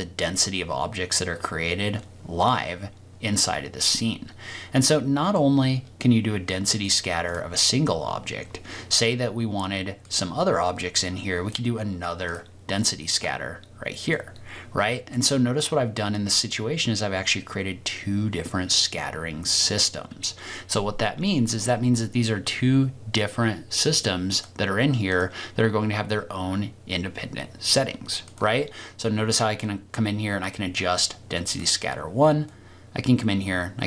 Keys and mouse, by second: 4.9 middle click, 7.2 click, 10.2-11.5 drag, 12.3 click, 14.1-15.1 middle drag, 28.3-29.0 drag, 29.6-30.8 drag, 32.4-33.8 drag.